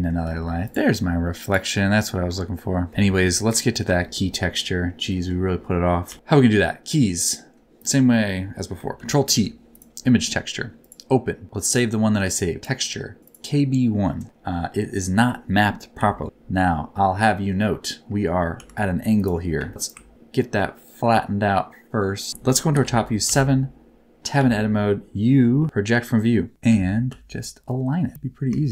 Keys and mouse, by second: 0.4 g, 0.6 click, 1.4 click, 2.4 middle click, 3.5 click, 4.1 shift+middle click, 5.0 middle click, 6.0 n, 6.1 KP_7, 7.2 middle click, 8.3 middle click, 8.9 ctrl+t, 9.3 g, 15.9 KP_7, 16.9 middle click, 18.5 n, 19.1 click, 19.6 shift+middle click, 20.1-22.3 ctrl+drag, 22.7 KP_7, 23.6 Tab, 24.3 a, 25.6 u, 26.6 a, 27.1 s, 28.4 g.